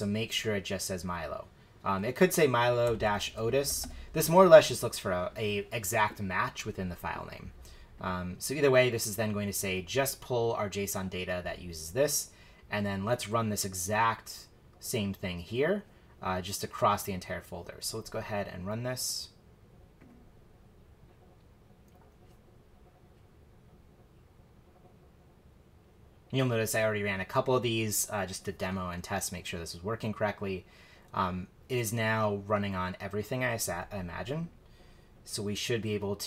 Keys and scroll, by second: 2.1 Right, 2.6-4.3 typing.